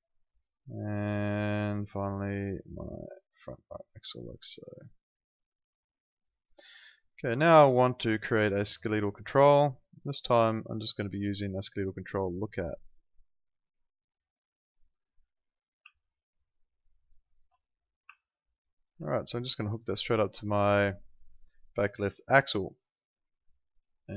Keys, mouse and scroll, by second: 0.4 right click, 1.0 click, 7.5 right click, 14.6 click, 16.0 ctrl+click, 17.6 click, 18.2 ctrl+click, 23.6 right click.